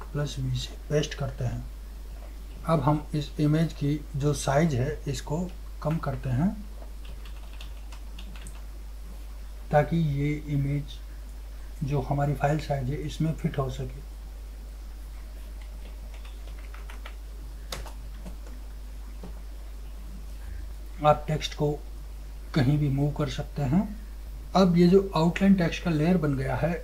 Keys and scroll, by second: 0.2 ctrl+shift+v, 2.5 ctrl+0, 5.6 ctrl+t, 19.2 ctrl+0.